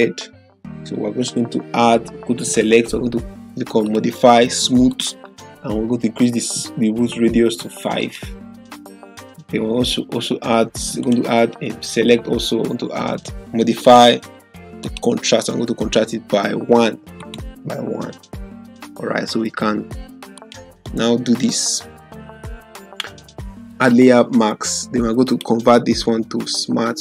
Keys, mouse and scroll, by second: 2.6 click, 2.8 click, 8.0 click, 11.0 click, 13.8 click, 17.2 click, 20.4 click, 25.4 right click.